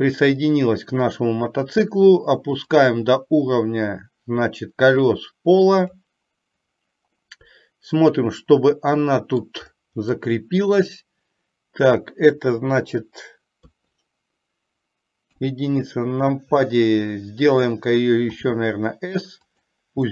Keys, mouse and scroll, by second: 3.0-6.2 drag, 7.3-9.7 middle drag, 10.3-12.3 middle drag, 13.7 KP_3, 15.3 KP_1, 18.5 s.